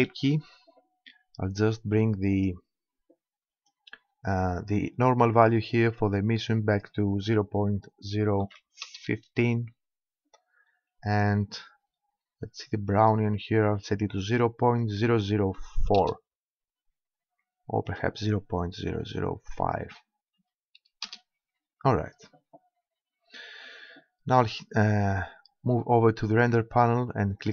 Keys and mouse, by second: 0.0 Escape, 2.3-4.1 drag, 4.1 middle click, 5.4-7.3 drag, 11.0-14.8 drag, 17.9-19.6 drag, 22.7-24.7 middle drag, 24.9-26.3 middle drag, 26.3-27.5 drag.